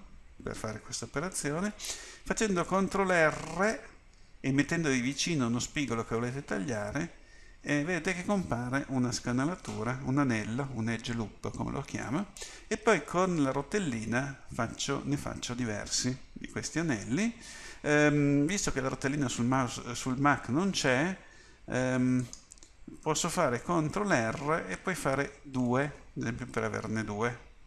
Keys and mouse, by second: 7.0 ctrl+r, 24.1 ctrl+r.